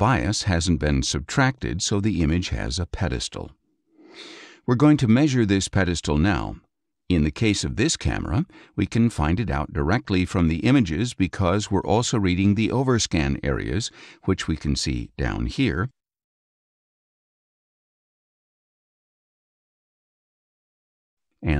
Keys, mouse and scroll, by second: 5.4 click, 13.1 click, 15.8 ctrl+shift+space, 16.0-17.7 ctrl+shift+drag, 19.7-20.3 scroll up 2, 20.4-20.8 scroll up 2.